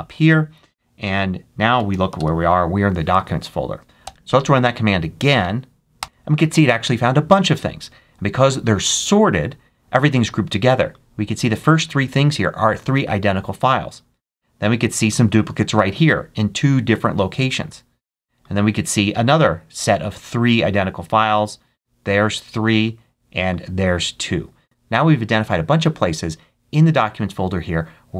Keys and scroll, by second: 1.4-2.5 typing, 3.9 Up, 5.9 Return.